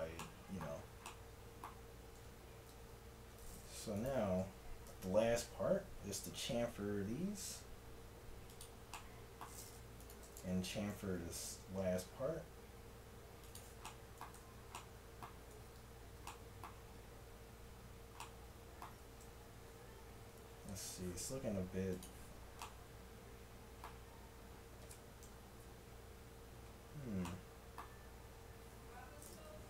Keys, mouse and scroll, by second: 4.0-8.2 drag, 4.9 ctrl+b, 8.9-10.2 middle drag, 11.0 ctrl+b, 14.4 Tab, 15.6 Tab, 19.3 a, 20.7 Tab, 23.6 middle click, 25.3 KP_1, 27.2 middle click, 28.8 Tab.